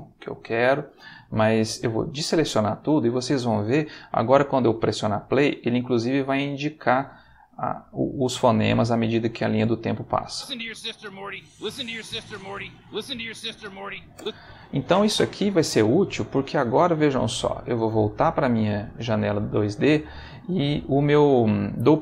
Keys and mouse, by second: 0.0 Escape, 1.9 a, 10.3 space, 14.1 space, 18.0 click.